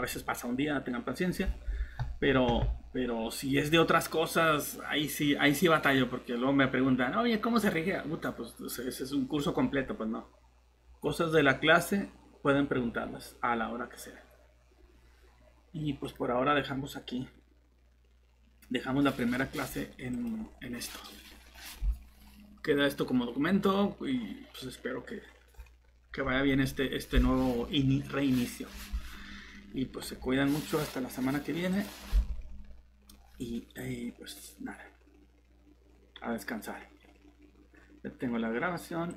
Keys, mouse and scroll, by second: 9.8 scroll down 1, 10.0 scroll up 1, 16.0 click, 20.4 Tab, 20.4 click.